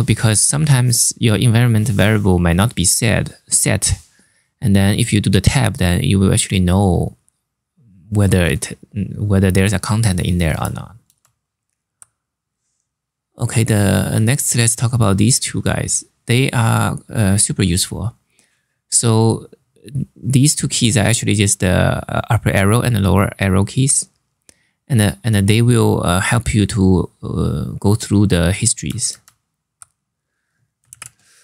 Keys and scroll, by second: 10.7 super+Tab, 28.8 super+Tab, 30.6 ctrl+c.